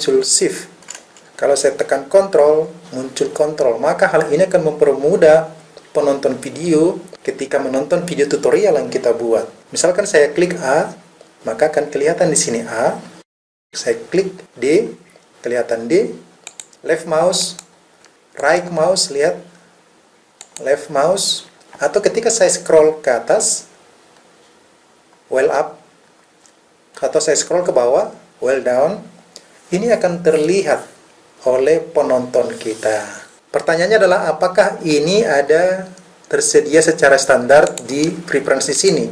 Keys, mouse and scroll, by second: 14.4 d, 16.4 click, 18.0 right click, 18.4-19.7 right drag, 20.4 click, 22.2-23.4 scroll up 1, 24.1-25.3 scroll up 1, 27.6-30.4 scroll down 1, 37.6-38.9 drag.